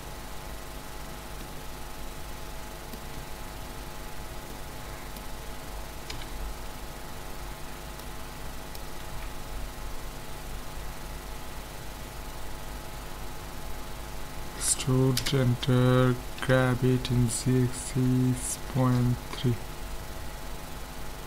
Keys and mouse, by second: 0.9-3.6 middle drag, 3.6 ctrl+z, 4.5-6.8 middle drag, 6.1 KP_1, 7.1 middle click, 8.0 click, 9.1 ctrl+z, 9.4 click, 14.5 e, 16.4 g.